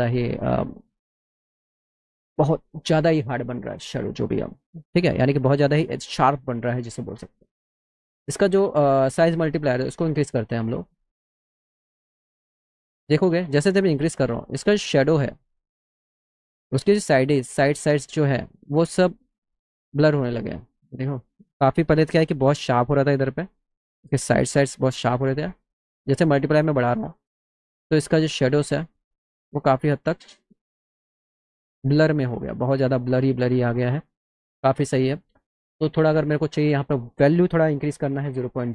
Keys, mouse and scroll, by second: 0.1 middle click, 10.7-11.8 drag, 16.6-19.2 drag, 26.8-28.1 drag, 36.0 click.